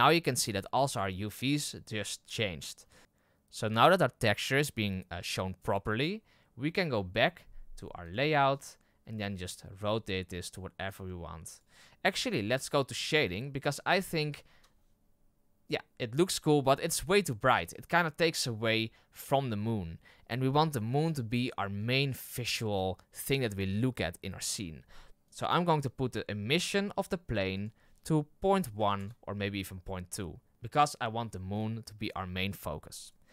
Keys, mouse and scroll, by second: 3.0 scroll up 5, 8.1 click, 8.8-9.3 scroll down 3, 9.3 right click, 9.7 r, 10.9 g, 11.7 r, 13.3 click, 14.4 KP_0, 18.3 right click, 25.2 right click, 28.9-30.5 drag, 30.5 right click, 33.0 right click.